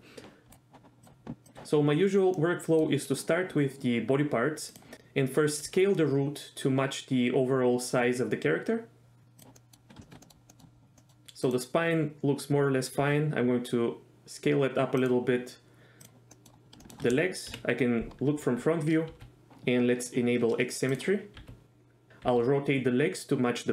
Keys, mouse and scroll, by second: 1.4 click, 2.4 middle click, 4.9 s, 5.7 s, 9.6 middle click, 10.0 shift+middle drag, 10.2 middle click, 10.5 middle click, 11.0 middle click, 11.4 drag, 13.0 s, 15.0 click, 16.0 click, 16.3 middle click, 16.8 shift+middle click, 17.5 KP_1, 19.1 r, 19.5 ctrl+z, 21.4 r, 22.1 r, 22.2 r.